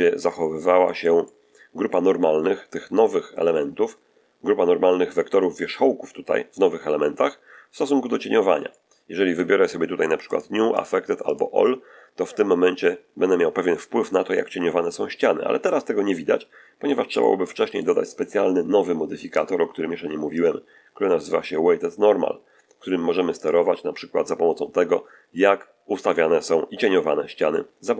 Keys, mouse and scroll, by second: 0.2 middle click, 1.1 middle click, 8.6 middle click, 10.2 click, 10.6 click, 11.2 click, 15.6-17.0 middle drag, 17.1-18.4 middle drag, 19.3 click, 20.2 click, 23.3 click.